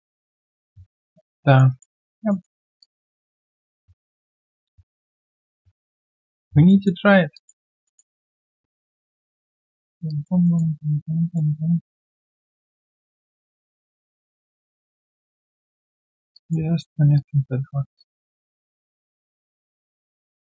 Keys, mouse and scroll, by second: 1.4 alt+middle click, 1.7 alt+right click, 2.0 alt+click, 2.3 alt+middle click, 2.8 typing, 4.2 ctrl+shift+q, 6.6 alt+middle click, 7.3 alt+click, 10.0 alt+click, 10.4 alt+middle click, 10.7 alt+click, 12.9 alt+click, 13.6 alt+click, 15.0 alt+click, 15.3 alt+middle click, 15.5 alt+click, 16.3 alt+click, 18.6 alt+middle click, 20.3 alt+middle click.